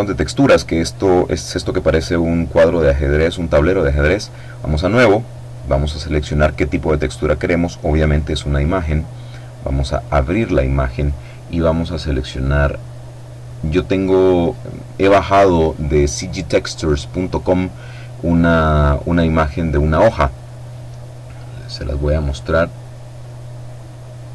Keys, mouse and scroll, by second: 3.8 click, 5.6 click, 8.2 click, 9.6 click, 12.0 click, 21.8 click.